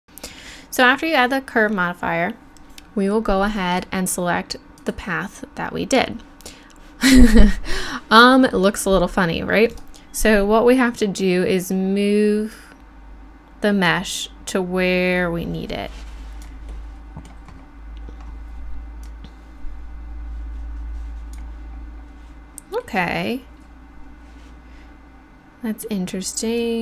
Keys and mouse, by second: 9.7-16.4 right drag, 19.1-23.3 drag.